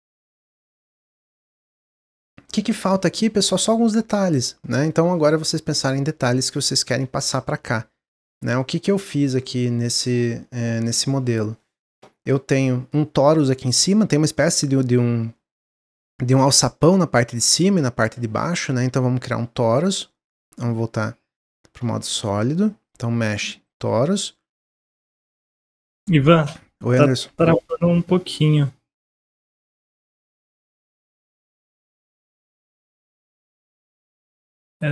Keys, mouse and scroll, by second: 0.4 click, 0.7-1.7 middle drag, 1.7-2.3 scroll up 4, 2.3-6.6 shift+middle drag, 10.9-15.3 middle drag, 18.3 shift+a, 21.3 click, 21.7 shift+a, 25.6-34.9 shift+drag.